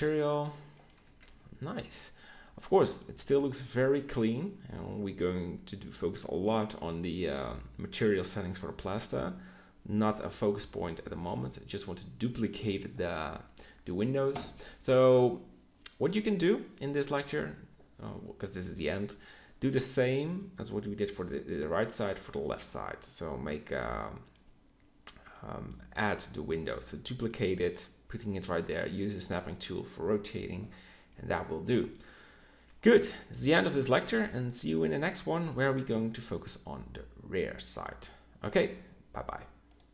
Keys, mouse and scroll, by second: 0.9 a, 5.2-7.8 middle drag, 20.8-21.8 middle drag, 22.4-23.8 middle drag, 27.5 middle click, 33.7-35.6 middle drag, 35.7 middle click, 36.2 middle click, 38.0 middle click, 38.3-39.9 middle drag.